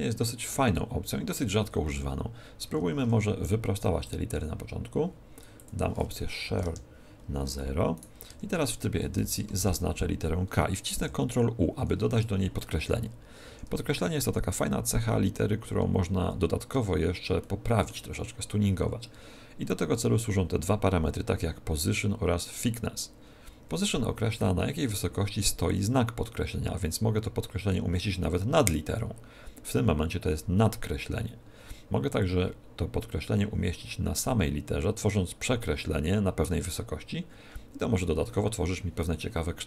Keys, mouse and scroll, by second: 2.6 Tab, 2.9 Tab, 4.0 click, 5.5 click, 7.9 right click, 8.2 Tab, 9.1 Left, 9.5 shift+Right, 10.9 ctrl+u, 13.4 Tab, 16.9-17.3 scroll up 1, 17.3 shift+middle click, 24.2 click.